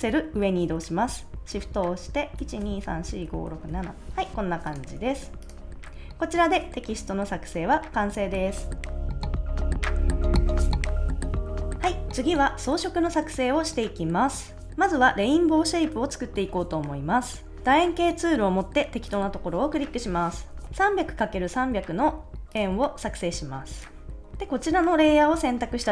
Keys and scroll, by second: 2.4 shift+Up, 4.9 super+s, 20.5 3.